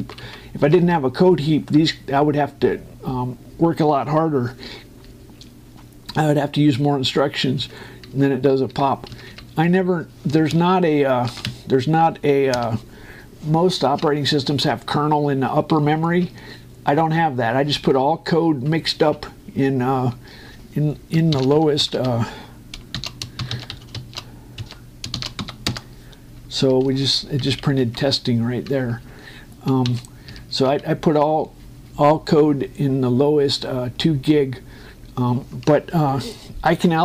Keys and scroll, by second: 9.4 Up, 9.8 Down, 10.4 Up, 11.5 ctrl+shift+Return, 12.2 Up, 13.3 Return, 22.0 shift+;, 23.8 shift+9, 24.2 shift+l, 25.3 2, 25.9 shift+w, 26.4 Return, 27.4 Up, 28.5 Right, 29.5 Down, 31.0 Up, 31.4 Left.